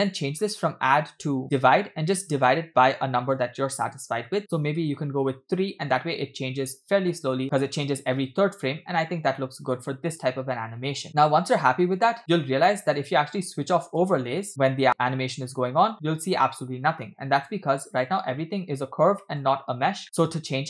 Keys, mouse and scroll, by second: 0.4-0.9 scroll up 2, 0.9-1.7 drag, 2.4-4.4 drag, 4.8 space, 11.1 middle click, 11.1-11.4 scroll down 5, 11.4-11.8 scroll up 3, 12.0-12.4 scroll down 3, 12.4 space, 13.3 space, 14.2 space, 16.3 click, 17.4 space, 17.9 click, 19.2 middle click, 19.4-20.2 scroll up 5, 20.0 middle click, 20.3 click.